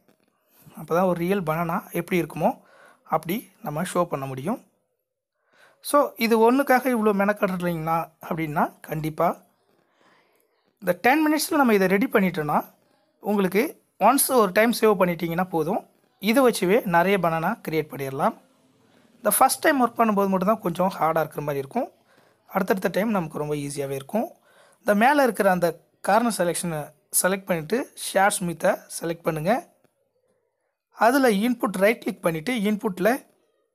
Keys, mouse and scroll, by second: 26.1 click, 26.5 click, 27.9 n.